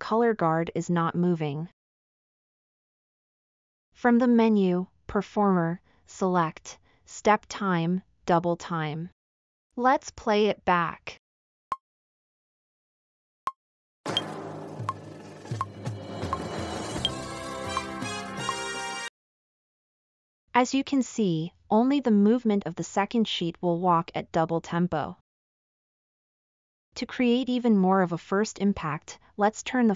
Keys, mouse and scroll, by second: 9.7 middle click, 10.0 scroll up 4.